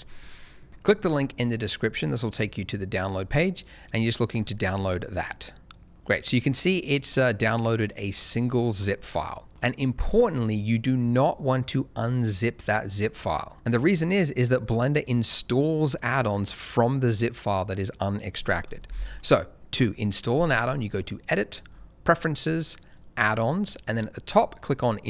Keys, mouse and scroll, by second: 4.2 click, 20.6 click.